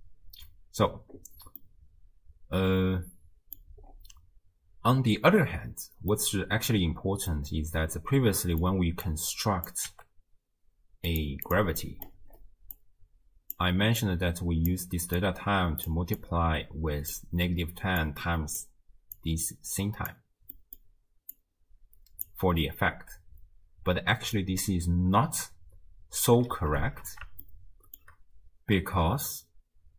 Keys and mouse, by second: 1.6-3.6 drag, 6.1 click, 6.4 right click, 6.6 middle click, 7.3 middle click, 8.1 click, 8.1 right click, 9.2-9.7 drag, 9.9 g, 11.5 click, 11.8 middle click, 12.8 click, 14.1 click, 15.2 click, 16.2-17.2 drag, 18.0 click, 19.2-20.2 drag, 20.6 middle click, 21.4-22.4 drag, 27.0 shift+space, 27.5-28.0 shift+drag, 28.6 space.